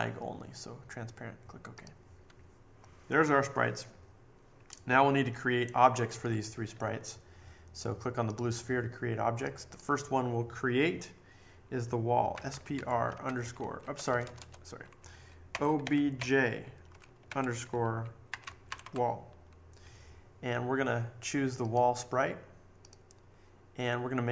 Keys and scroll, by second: 12.1-14.2 typing, 15.2-19.3 typing.